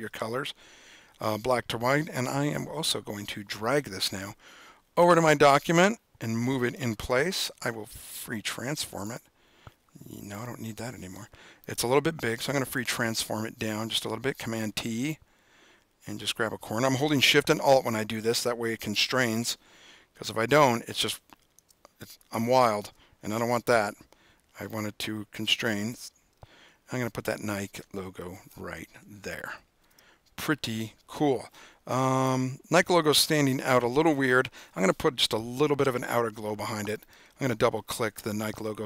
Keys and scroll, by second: 7.3 super+t, 13.0 super+t, 23.6 super+z, 33.3 super+=.